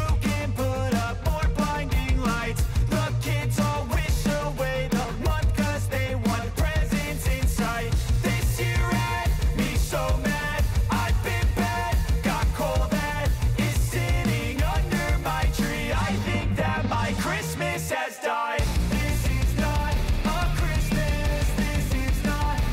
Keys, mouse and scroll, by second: 6.7 click, 8.6 ctrl+alt+Home, 10.3 click, 11.9 r, 13.1 click, 14.2 Return, 15.8 s, 16.3-22.7 drag.